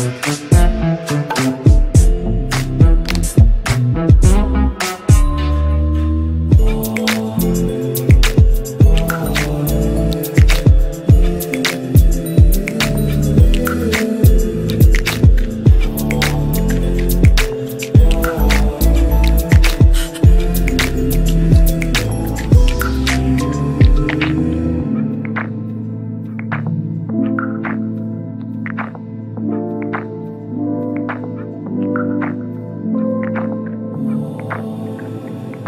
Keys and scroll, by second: 9.9 KP_Add, 23.9 KP_Add, 31.9 KP_Add.